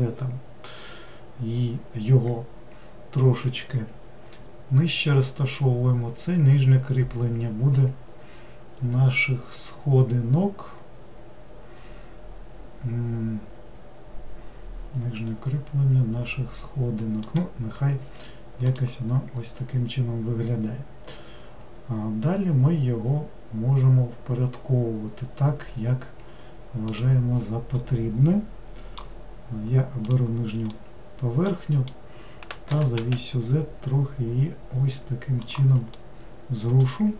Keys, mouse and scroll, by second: 27.8-30.1 middle drag, 30.1 click, 30.7-32.8 middle drag, 32.8 g, 36.0-37.1 middle drag.